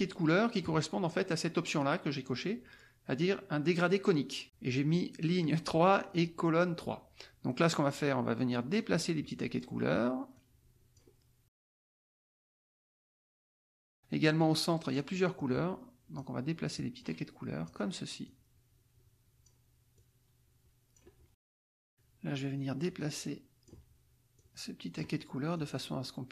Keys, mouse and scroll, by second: 7.4 click, 8.7-9.7 drag, 10.3 click, 11.6 click, 12.7 click, 14.4 click, 15.3-16.4 drag, 16.7-17.8 drag, 18.2-19.6 drag, 19.9-21.1 drag, 22.9 click, 24.3 click, 25.5-26.3 drag.